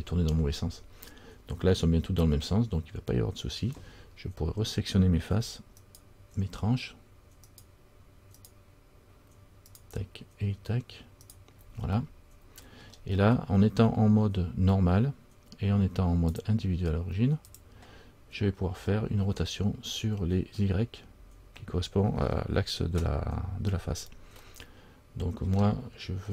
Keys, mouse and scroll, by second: 6.0 shift+right click, 7.6 shift+right click, 12.2 middle click, 16.5 click, 17.7 click, 24.7 middle click, 24.7-25.4 scroll up 1.